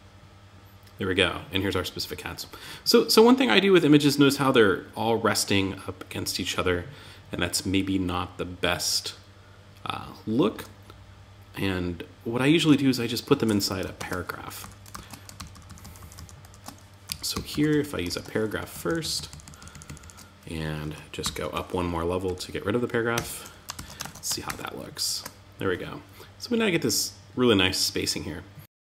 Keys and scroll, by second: 11.9 super+Tab, 13.3 super+z, 14.0 Up, 14.3 alt+Left, 16.4 Left, 18.1 alt+Right, 21.6 Down, 22.5 Tab, 23.1 super+s, 23.4 super+Tab, 23.8 super+r.